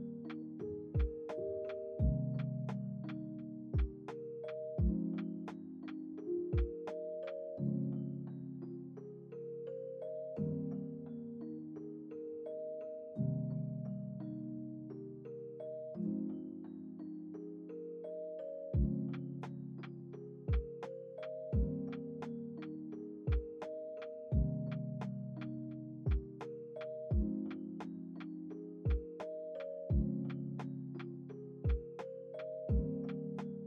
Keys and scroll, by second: 0.4 1, 0.5 Return, 5.2 ctrl+c, 6.1 ctrl+v, 8.3 ctrl+c, 8.5 ctrl+v, 8.8 ctrl+s, 11.2 space, 15.0 space, 15.2 ctrl+s, 24.7 x, 28.2 ctrl+z, 28.8 ctrl+s, 30.5 ctrl+s.